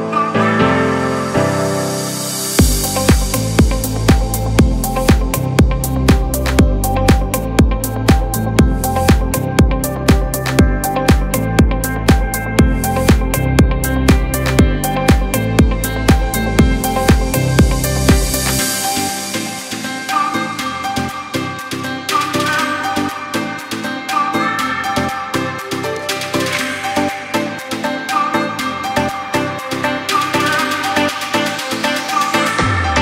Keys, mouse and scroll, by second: 0.5 alt+scroll up 1, 4.0 alt+scroll up 1, 4.2-4.5 alt+scroll down 1, 4.7 space, 4.8 click, 5.2 space, 7.0 click, 7.3 space, 7.4 click, 7.8 space, 8.8 click, 12.2-14.4 drag, 14.4 ctrl+c, 15.7 click, 17.5 alt+click, 18.6-19.0 alt+scroll up 1, 19.8 click, 20.5 ctrl+a, 21.4 ctrl+v, 23.0-27.4 drag, 27.7 click, 30.1 Return, 31.8 click, 32.5-33.0 alt+shift+drag.